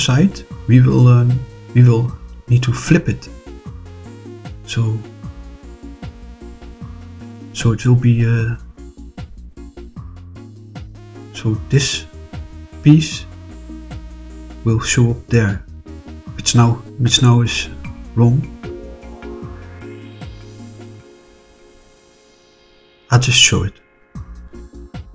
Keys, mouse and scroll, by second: 4.0 click, 10.0 click, 10.6-11.6 middle drag, 13.9-15.4 middle drag, 18.3-23.1 middle drag.